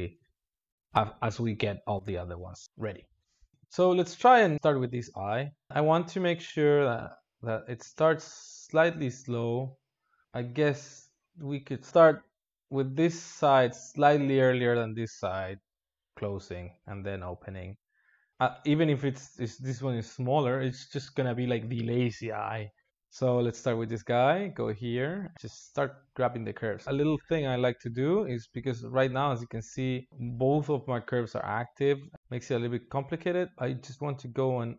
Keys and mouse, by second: 0.8 click, 7.0-10.2 drag, 11.9-22.9 drag, 23.8-26.8 drag, 26.8 ctrl+z, 29.1-34.7 drag.